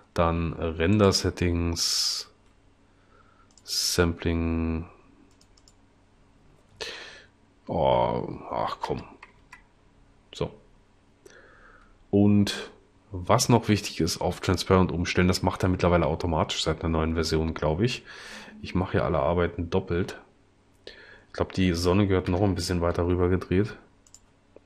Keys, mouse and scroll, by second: 8.8 0, 9.6 Return, 22.3 r, 23.1 y.